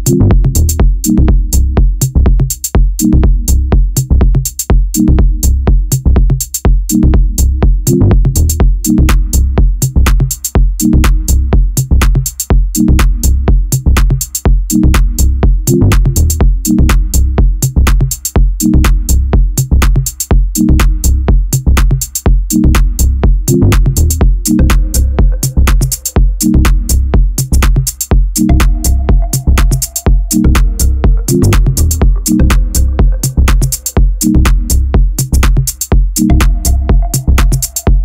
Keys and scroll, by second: 0.2 2, 6.0 a, 10.9 e, 12.9 a, 14.3 e, 15.5 a, 31.1 ctrl+b.